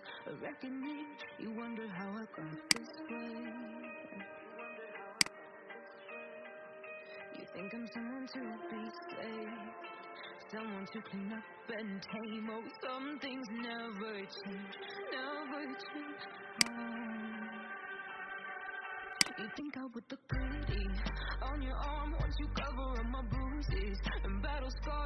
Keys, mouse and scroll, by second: 0.1 alt+scroll down 1, 2.7 click, 3.6 alt+scroll up 1, 5.2 click, 17.6 Delete, 19.1 click, 20.8-22.2 scroll down 1.